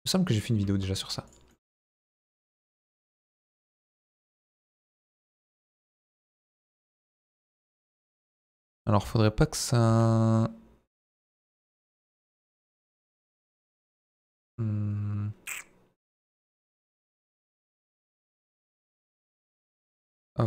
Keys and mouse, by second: 0.6 z, 1.5 middle click, 2.1 middle click, 2.7 KP_1, 3.0 z, 4.9 i, 7.4 click, 9.9 s, 12.3 shift+y, 13.6 click, 14.4-18.9 middle drag, 19.5-20.4 right drag.